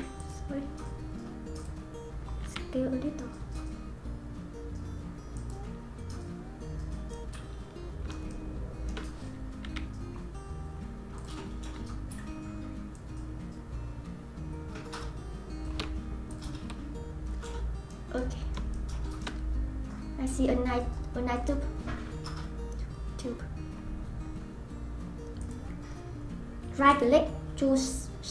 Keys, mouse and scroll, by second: 1.6 click, 2.4 s, 6.4 scroll down 1, 6.6-7.1 scroll up 6, 7.1-9.6 middle drag, 9.6 s, 12.9-16.4 drag, 17.4-19.4 middle drag, 19.4-20.4 scroll down 4, 20.4-21.1 scroll up 3, 21.1-24.7 scroll down 1, 25.4 click, 26.9-28.3 right drag.